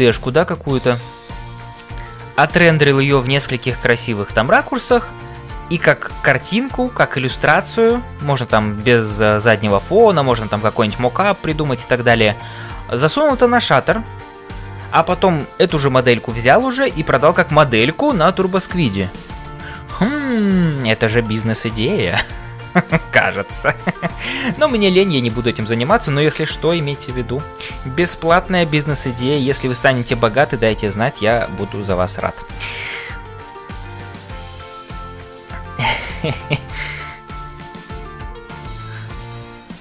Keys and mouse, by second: 0.0-39.8 typing, 20.6 shift+middle click, 22.4 shift+middle click, 24.4 shift+middle click, 25.9 shift+middle click, 27.0-28.2 drag, 37.2 middle click, 38.4 click, 39.0 middle click.